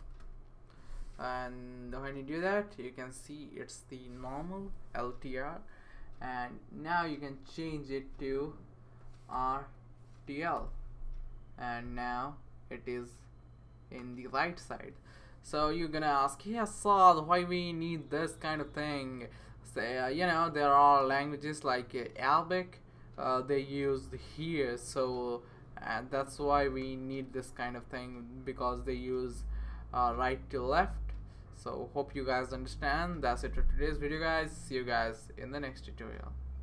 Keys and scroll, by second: 0.0-0.7 typing, 9.3 typing, 10.6 Return.